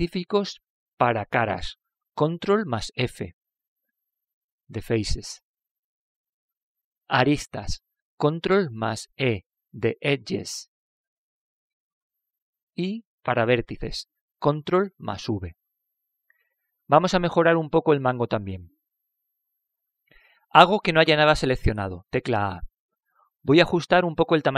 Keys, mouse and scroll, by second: 9.9 ctrl+e, 15.9 ctrl+v, 23.5 a.